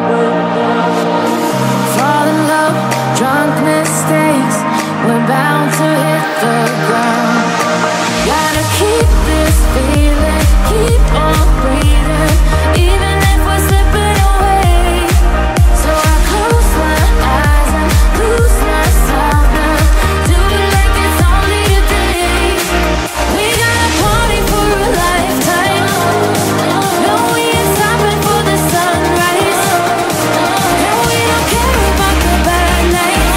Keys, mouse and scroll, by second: 0.8 shift+a, 2.8 shift+a, 7.0 click, 8.4 s, 11.4 s, 17.2 s, 20.4 s, 24.8-25.8 scroll up 1, 27.8 click, 28.7 click, 30.3 Tab, 31.2 3, 31.6 click.